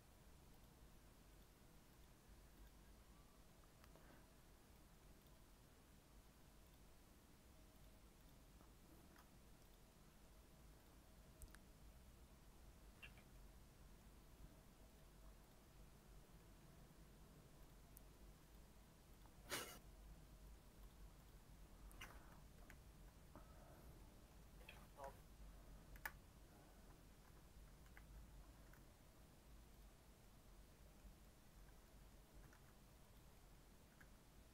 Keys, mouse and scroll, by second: 4.6 scroll down 1, 4.7 middle click, 5.2 click, 5.5 scroll up 3, 6.0 scroll down 1, 6.7 click, 13.0 click, 13.3-15.6 middle drag, 15.6 click, 16.3-17.6 middle drag, 17.6-19.2 drag, 19.3 scroll up 2, 19.8-20.9 middle drag, 20.9 click, 21.2 click, 22.5 KP_1, 23.9 middle click, 24.4 scroll up 1, 24.8-25.9 shift+middle drag, 25.9 KP_Decimal, 26.6 Tab, 27.2 Tab, 27.8 KP_1, 28.7 g, 30.2 middle click, 31.0-31.6 scroll up 3, 31.2 middle click, 31.9 middle click, 32.3 g, 33.3 middle click, 33.9 g.